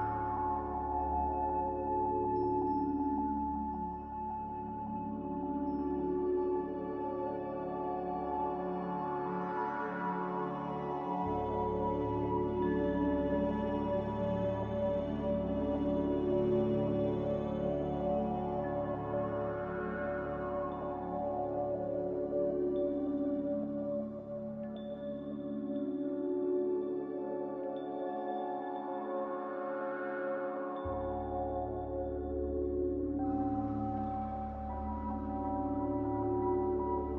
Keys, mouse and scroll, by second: 4.5 a, 5.2 n, 11.1 Escape, 11.3 Escape, 11.4 Escape, 11.7 n, 20.3 n, 26.5 a, 27.7 f, 36.2 n.